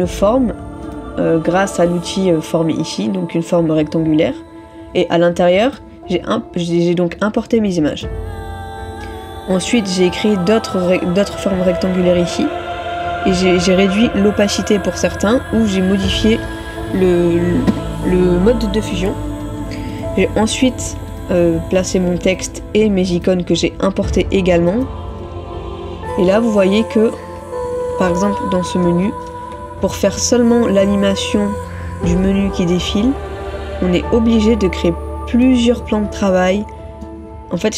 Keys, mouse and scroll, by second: 27.8 ctrl+-, 28.9 ctrl+-, 30.2 middle click, 34.9 middle click.